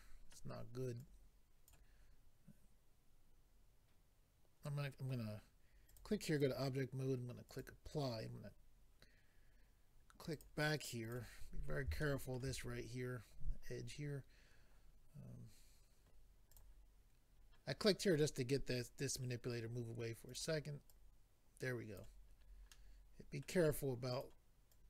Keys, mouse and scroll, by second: 1.0 click, 5.9 click, 6.4 click, 6.4 double click, 7.5 double click, 10.3 click, 11.0 click, 11.5 scroll up 2, 12.0 shift+middle click, 12.6-13.0 scroll up 2, 13.9 scroll up 1, 16.5 click, 20.3 click, 20.9 click, 22.3-22.7 scroll down 2, 22.7 middle click, 24.1 click, 24.7 click.